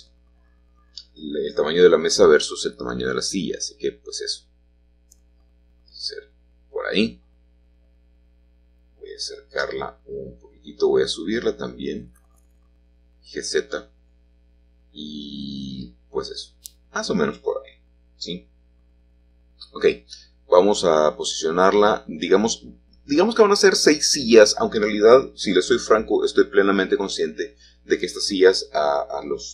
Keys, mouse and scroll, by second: 1.3 1, 3.0 g, 7.7-11.0 shift+drag, 11.3 g, 14.0-16.8 shift+drag, 18.4-19.5 scroll down 2, 19.5-20.5 scroll down 1, 20.9 g, 24.4-25.5 drag.